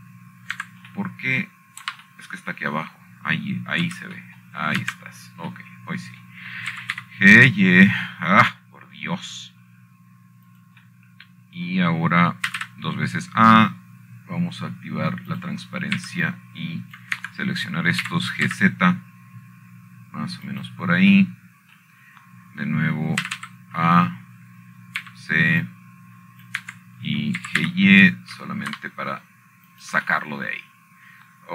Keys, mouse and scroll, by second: 0.1 middle click, 0.3 Escape, 0.6-1.4 scroll down 2, 1.5 middle click, 2.1 g, 2.3 y, 3.3 Escape, 4.6 shift+middle click, 5.5-6.6 shift+middle drag, 6.6 c, 7.2 middle click, 7.6 Escape, 8.0-8.8 scroll down 2, 8.8 scroll down 1, 9.0 middle click, 13.2-14.4 drag, 14.4 middle click, 15.2 typing, 18.0 click, 18.7 typing, 19.0 click, 19.9 Escape, 20.8 g, 21.2 z, 23.2 click, 24.5 middle click, 26.0 a, 26.1 a, 27.7 c, 28.3 click, 29.3 Escape, 30.1 g, 30.3 y.